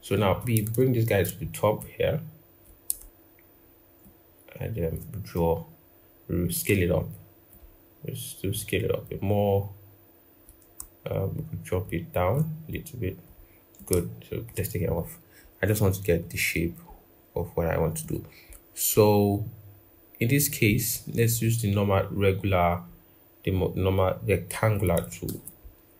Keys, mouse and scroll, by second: 3.8 shift+click, 7.3 shift+click, 11.6 shift+click, 16.7 right click, 20.6 right click, 25.1 ctrl+=.